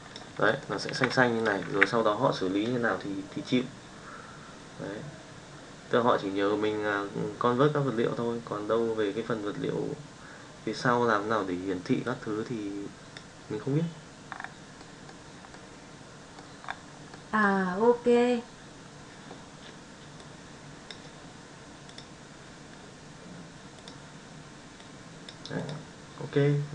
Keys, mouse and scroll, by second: 0.1 click, 0.1 ctrl+v, 0.5 middle drag, 0.8 shift+middle drag, 1.4 click, 1.8 alt+a, 12.2-13.2 drag, 14.8-15.1 middle drag, 15.5-16.4 middle drag, 17.1-17.5 middle drag, 20.2 click, 22.0-23.8 drag, 24.9 click, 25.6 click.